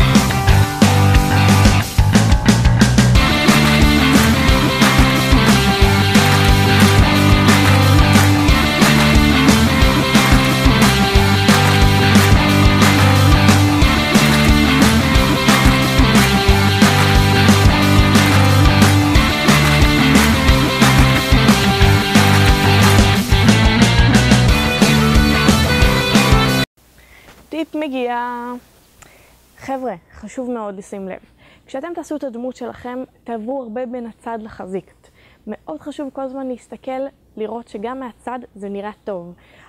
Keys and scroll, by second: 4.3 a, 4.7 b, 7.4 typing, 11.5 a, 12.1 b, 14.5 typing, 17.5-17.8 typing, 19.7-20.1 typing, 23.0 3.